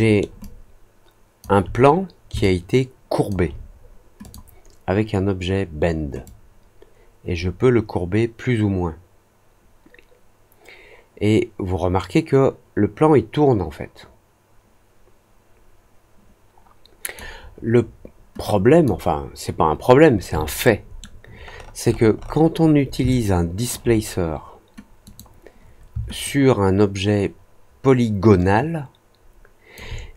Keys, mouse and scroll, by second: 0.3-1.3 alt+drag, 2.3 alt+click, 4.2 click, 6.2-17.1 drag, 18.4-18.8 drag, 20.6-20.9 alt+middle drag, 21.4-22.0 alt+scroll up 4, 22.1 alt+middle click, 23.0-23.6 alt+drag, 25.0 click, 26.2-29.7 alt+drag.